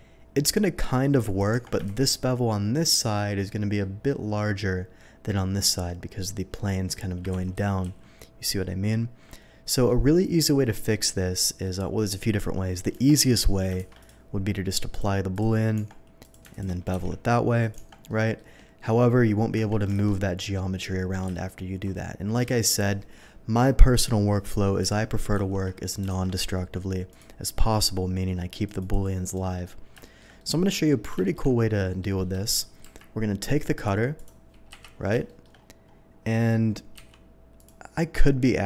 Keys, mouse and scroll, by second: 0.2-0.5 scroll down 1, 1.2 click, 1.5 Tab, 1.9 shift+2, 3.4 middle click, 7.3 ctrl+z, 7.7 ctrl+z, 9.4 middle click, 10.9 middle click, 12.9 Tab, 13.8 shift+2, 14.0 click, 14.9 click, 15.3 click, 15.7 Tab, 16.2 click, 16.5 alt+click, 16.9 ctrl+b, 17.2 middle click, 17.2 scroll up 1, 17.6 click, 17.8 Tab, 18.0 middle click, 20.0 alt+a, 21.3 ctrl+z, 21.9 ctrl+z, 25.0 ctrl+z, 26.1 alt+v, 27.1 click, 28.6 click, 28.9 click, 29.3 middle drag, 30.0 shift+middle drag, 30.3-30.9 shift+middle drag, 31.2 shift+middle click, 31.9 shift+middle click, 32.8 q, 33.7 click, 34.1 click, 34.7 KP_3, 35.2 middle drag, 35.2 shift+KP_3, 36.9 d, 37.5 click.